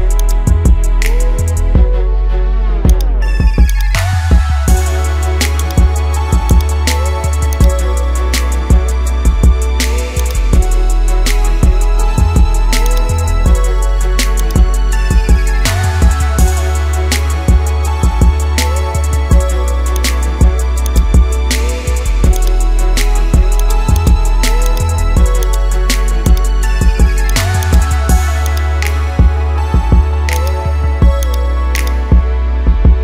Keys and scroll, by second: 10.9 ctrl+0.